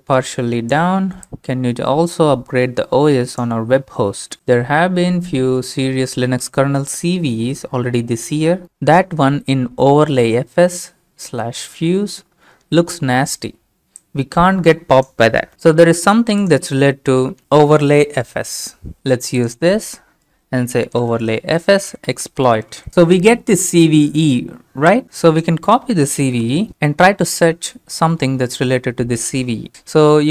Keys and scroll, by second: 19.0 ctrl+c, 20.9 ctrl+v, 21.7-23.3 typing, 26.2 ctrl+c, 28.1 ctrl+v.